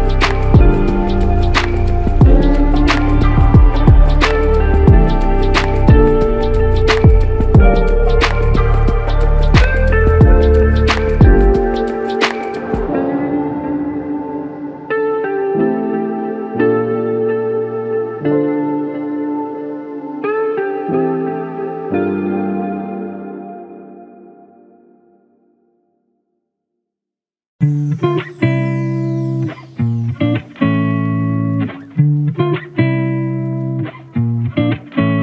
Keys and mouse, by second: 1.7 double click, 2.8 alt+click, 5.3 double click, 5.9 alt+click, 7.3 ctrl+alt+click, 8.3 alt+shift+click, 9.1 alt+click, 10.6 f, 12.2 double click, 14.8 alt+click, 16.3 double click, 19.1 ctrl+alt+click, 20.9 double click, 30.9 click, 33.5 f, 35.0 double click.